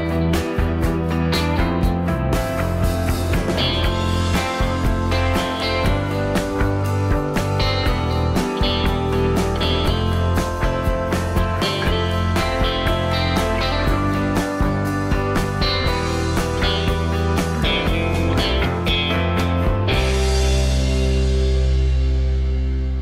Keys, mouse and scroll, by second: 3.4 m, 7.8 x, 8.2 x, 8.5 Left, 13.9 s, 19.1 m.